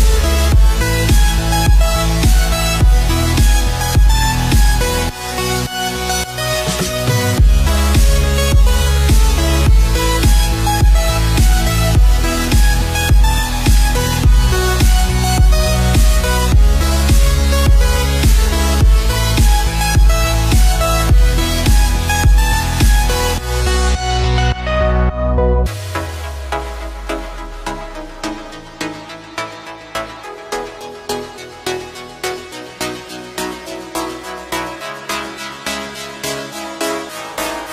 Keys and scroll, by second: 9.0 ctrl+z, 19.4 ctrl+z, 20.5 ctrl+z, 31.3 space, 37.3 space.